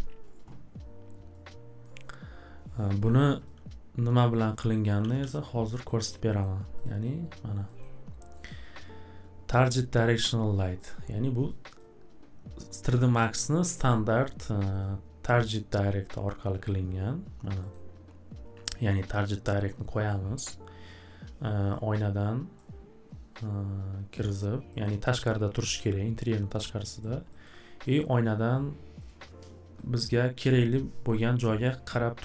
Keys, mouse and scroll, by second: 2.7 click, 3.4 click, 4.5 click, 5.0 alt+w, 5.2 alt+w, 5.9 scroll up 1, 6.4 scroll up 1, 6.8 click, 7.8-8.3 scroll up 1, 8.3-10.2 scroll up 1, 10.2 scroll, 10.8 scroll, 11.5 click, 11.8 click, 14.8 click, 17.7-19.8 scroll, 22.6 click, 22.7 scroll, 24.0 w, 24.8 scroll, 27.0 click, 27.4 middle click, 28.2 scroll, 29.1 click, 29.9 scroll.